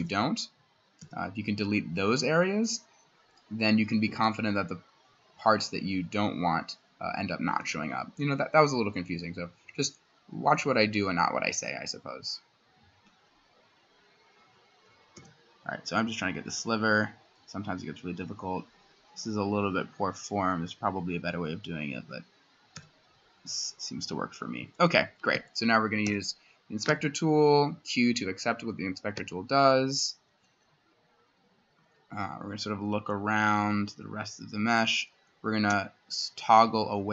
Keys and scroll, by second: 0.0 c, 1.0 x, 7.6 c, 15.2 c, 22.8 x, 25.4 Escape, 26.1 i, 26.9 q, 29.2 Escape.